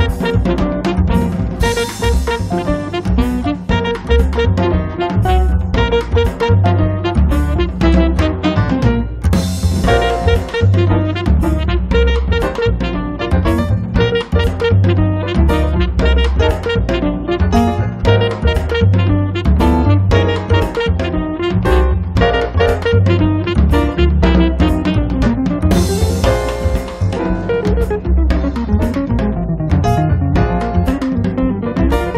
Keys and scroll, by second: 0.3 p, 1.8 1, 2.2 5, 2.5 Return, 5.8 space, 12.9 p, 15.6 1, 15.9 0, 16.3 Return, 16.7 space, 17.7 l, 20.0 p, 21.1 5, 21.4 Return, 21.7 space, 22.3 Escape, 25.1 space, 30.1 f.